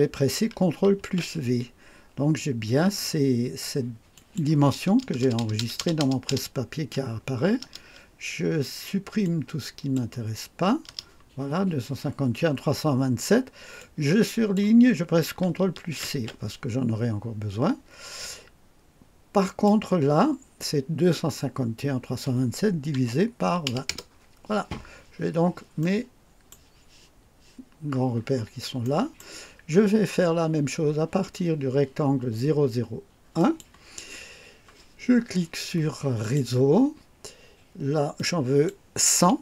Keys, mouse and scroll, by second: 0.9 ctrl+v, 4.1 click, 4.9 BackSpace, 7.5 BackSpace, 9.2 click, 10.8 BackSpace, 13.7 click, 16.0 ctrl+c, 19.4 click, 22.9-24.1 typing, 24.9-25.4 scroll down 2, 25.7 right click, 27.7 scroll down 1, 28.1-28.5 scroll up 1, 28.8 right click, 33.3 click, 36.1 click, 38.1 click.